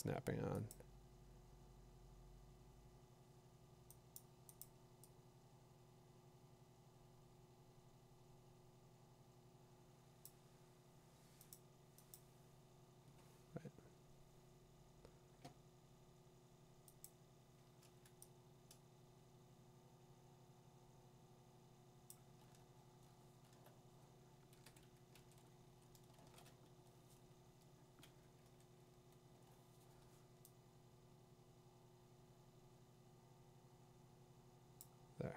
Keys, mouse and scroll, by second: 3.6 click, 4.2 click, 4.6 click, 10.2 click, 11.5 click, 12.1 click, 17.4-22.1 drag, 22.4 scroll, 23.7 middle click, 26.9 i, 26.9 shift+n, 28.4 i, 30.2 ctrl+i, 34.8 click.